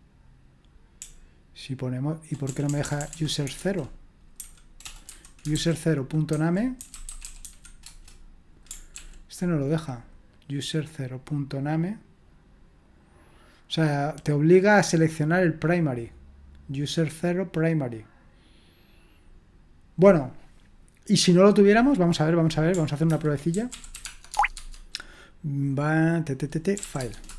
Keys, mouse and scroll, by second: 1.0-7.4 typing, 7.8 Return, 8.9 ctrl+p, 23.1 ctrl+c, 23.3-24.5 typing, 24.5 Tab, 26.5-27.3 typing.